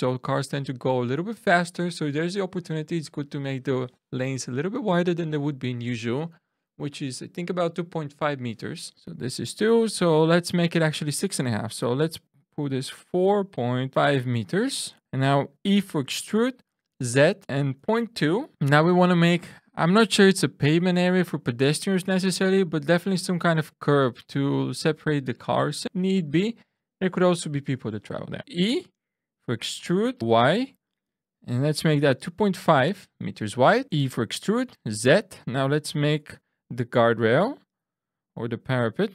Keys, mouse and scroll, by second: 10.2 click, 13.0 4, 13.5 ., 13.9 5, 14.8 middle click, 15.7 e, 16.8 z, 17.7 ., 17.9 2, 18.5 Return, 28.4 e, 30.2 x, 30.2 y, 31.6 2, 31.7 ., 31.9 5, 32.4 Return, 33.8 shift+middle click, 33.8 e, 34.6 z.